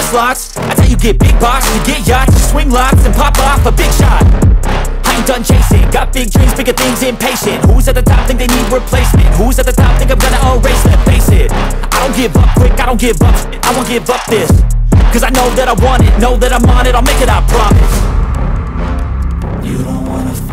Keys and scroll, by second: 3.6 alt+w, 3.9 c, 4.8 alt+c, 4.9 alt+w, 5.7 p, 7.4 F2, 12.1 shift+F2, 12.4 F3, 12.8 Escape, 19.5 ctrl+r.